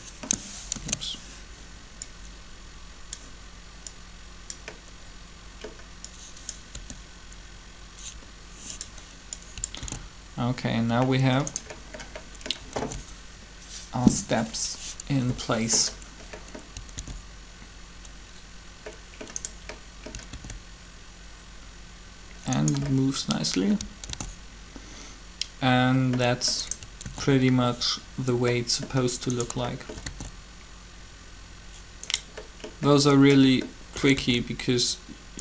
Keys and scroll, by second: 0.7 ctrl+z, 6.7 r, 9.8 alt+a, 12.8 alt+a, 16.9 alt+a, 20.1 alt+a, 23.8 alt+a, 26.8 alt+a, 29.9 alt+a, 34.1 alt+a.